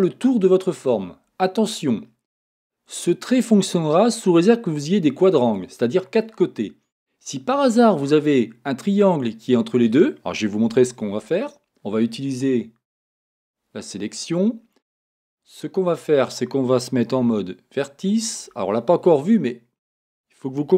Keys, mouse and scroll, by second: 13.2-18.5 drag, 18.3 1.